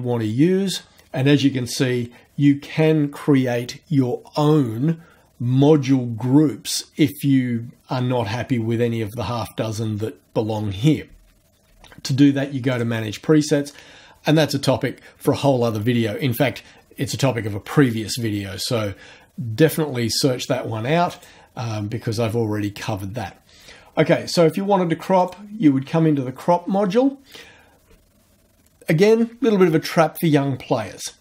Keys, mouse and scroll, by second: 12.7 click, 21.1 click, 25.2 click.